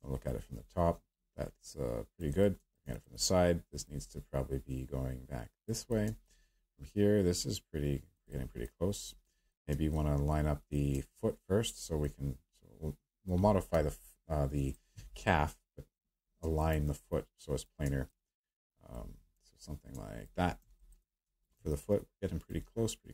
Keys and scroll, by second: 13.7 p.